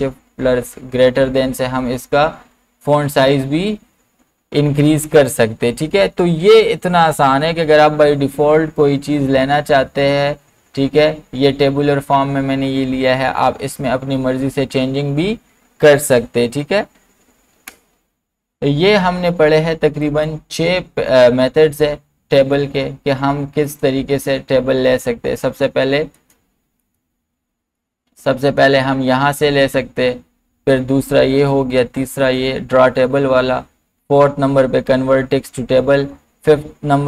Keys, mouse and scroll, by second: 0.5 ctrl+shift+., 16.1 ctrl+shift+., 17.0 ctrl+z, 20.0 ctrl+z, 20.1 click, 23.7 click, 26.2 click.